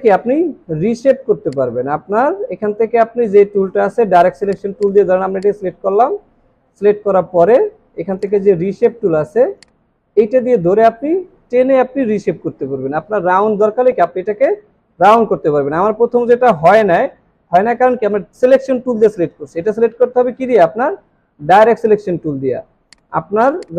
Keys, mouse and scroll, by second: 4.9 double click, 23.5 space.